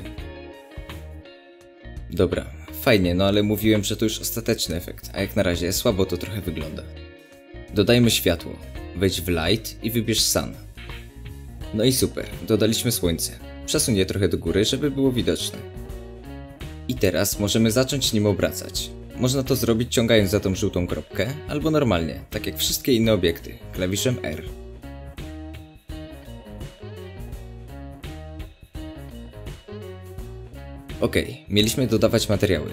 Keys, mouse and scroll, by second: 5.4 shift+a, 12.3-14.7 drag, 14.3-14.7 scroll down 2, 14.7-18.4 middle drag, 15.9-16.2 scroll up 2, 17.2-18.4 scroll down 2, 18.4-22.4 drag, 22.4-24.3 middle drag, 23.1 g, 24.3 click, 24.5 r, 25.7 click, 25.8 r, 26.3 click, 26.4 r, 27.7 click, 27.8 scroll up 2, 28.4-31.1 middle drag, 29.0 r, 31.1 click, 32.5 click.